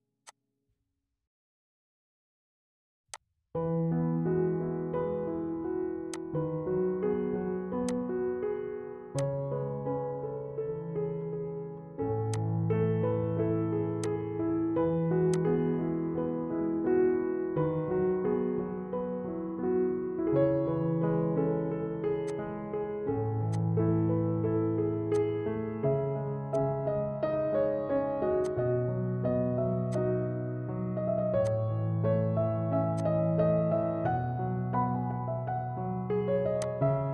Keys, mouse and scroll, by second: 3.2-4.7 drag, 4.7 Tab, 6.3 click, 12.5 click, 17.9 Tab, 19.3 Tab, 27.2 click, 27.5-27.8 scroll down 1, 28.6-29.9 drag, 29.9-31.5 drag, 31.5-32.9 drag, 32.8 typing, 32.9-34.4 drag, 36.7 click.